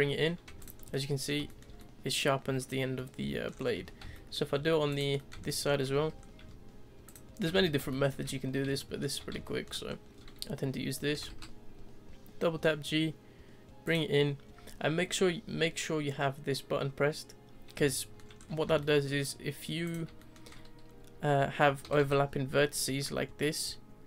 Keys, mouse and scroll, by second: 0.5 Tab, 0.6 click, 0.8 scroll down 2, 0.9-2.4 middle drag, 2.4-2.8 scroll down 1, 2.9-3.5 middle drag, 3.5-3.8 scroll up 4, 3.8 Tab, 4.1-4.9 shift+middle drag, 4.9 click, 5.2-5.9 middle drag, 5.9 z, 6.2-7.0 scroll up 1, 7.0 shift+click, 7.5 z, 7.9-8.6 shift+middle drag, 8.6 scroll down 1, 8.8-9.9 shift+middle drag, 9.9-11.1 scroll up 1, 11.1 g, 17.8-18.4 shift+middle drag, 18.4-18.8 scroll up 3, 18.8 shift+middle click, 19.2-19.8 scroll up 1, 19.8 click, 20.2 shift+middle click, 20.5-21.0 scroll up 2, 21.0-21.8 scroll down 1, 21.8 g.